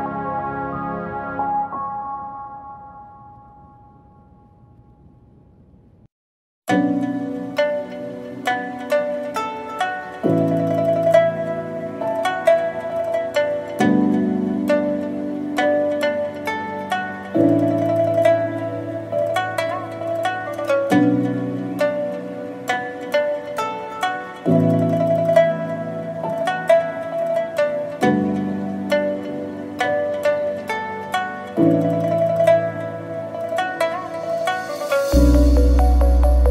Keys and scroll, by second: 6.2 ctrl+z, 11.7 Tab, 12.4 ctrl+x, 15.7 Tab, 18.2 Tab, 24.8 ctrl+z, 27.1 ctrl+z, 35.3 ctrl+z.